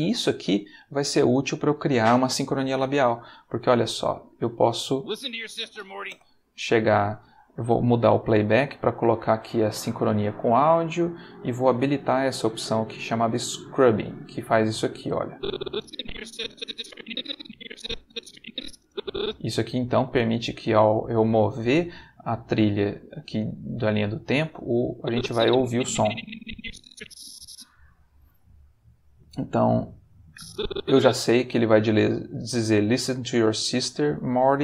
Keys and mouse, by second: 4.0 click, 4.9 space, 6.1 space, 7.9 click, 8.8 click, 10.0 click, 13.6 click, 15.3-19.3 drag, 25.0-27.6 drag, 30.3 click.